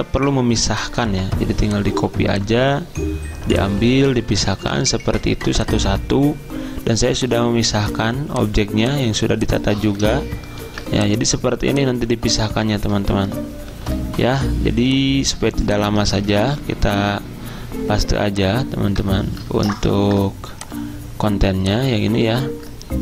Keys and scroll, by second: 1.2 ctrl+z, 4.6 ctrl+z, 10.7 ctrl+z, 13.8 ctrl+g, 16.4 ctrl+v, 19.8 ctrl+z.